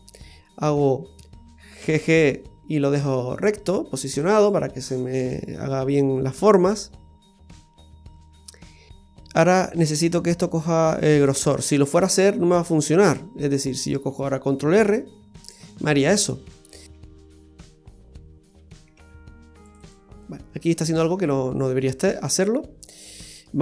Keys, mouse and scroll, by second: 1.8 g, 4.8-5.4 scroll down 3, 5.4 middle click, 6.7 middle click, 12.4-13.5 scroll up 3, 13.1 middle click, 14.8 ctrl+r, 16.9 ctrl+r, 19.0 ctrl+r, 19.9 click, 22.4 middle click, 23.5 scroll up 1.